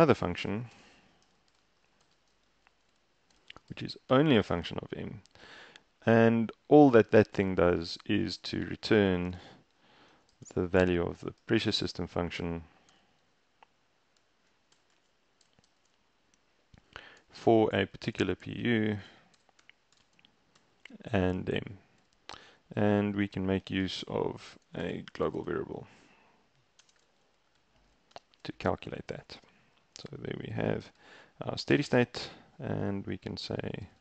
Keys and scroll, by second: 0.1-4.7 typing, 8.5-15.7 typing, 18.0-20.6 typing, 22.1 Up, 23.2 ⟲, 24.6-28.1 typing, 28.2 shift+Return, 31.8 shift+Return, 33.3 Return, 33.5-33.9 typing.